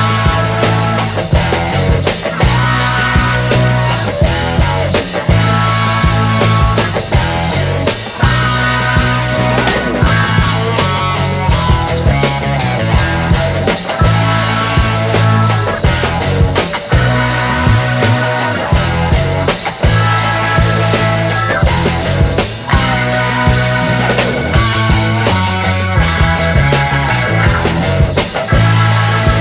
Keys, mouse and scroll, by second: 0.0-2.5 drag, 3.8 click, 5.9 click, 6.6 click, 7.7 click, 9.0 shift+Right, 9.7 Right, 11.8-14.2 drag, 15.3 click, 16.6 click, 18.4 shift+Left, 19.5-22.3 drag, 23.5 click, 25.3 click, 26.4 shift+Right, 27.8-29.4 drag.